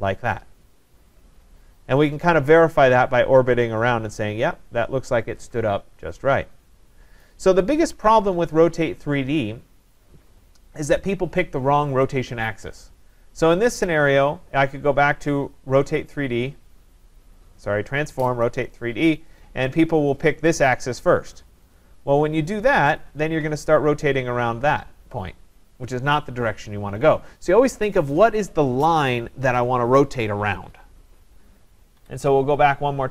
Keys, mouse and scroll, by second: 7.2 right click, 8.0 ctrl+z, 14.0 click, 18.5 click, 20.2 click, 21.7 click, 23.0 click, 32.0 Escape.